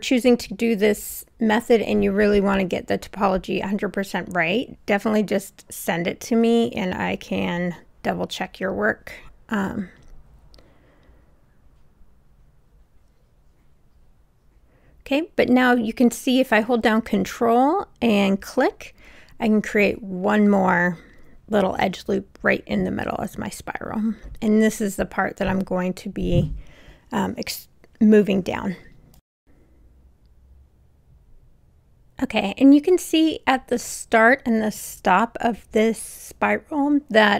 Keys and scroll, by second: 8.5 Return, 25.4 w.